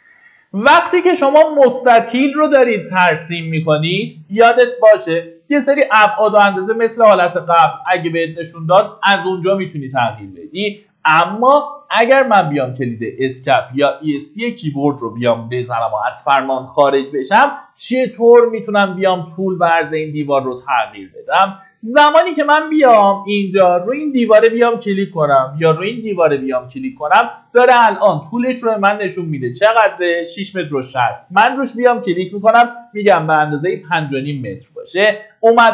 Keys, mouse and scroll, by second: 0.5-0.9 scroll up 1, 1.4-2.4 drag, 11.7 Escape, 18.1 click, 21.3 scroll up 1, 24.0 click, 32.4 KP_5, 32.6 KP_Decimal, 32.7 KP_5.